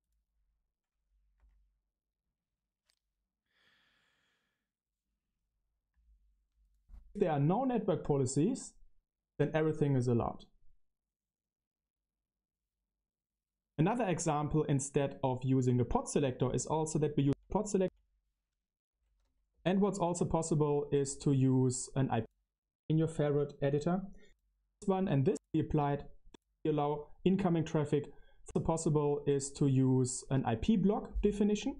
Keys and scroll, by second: 17.7 Right, 19.7 ctrl+alt+shift+1, 20.1 ctrl+alt+shift+1.